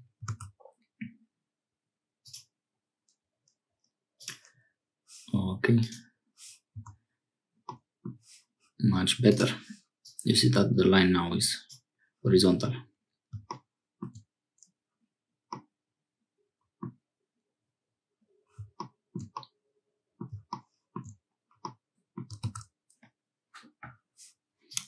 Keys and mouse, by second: 0.2 ctrl+r, 6.8 Tab, 7.7 middle click, 9.3 click, 10.1-11.6 drag, 15.5-16.9 middle drag, 19.3-21.0 middle drag, 21.6 middle click.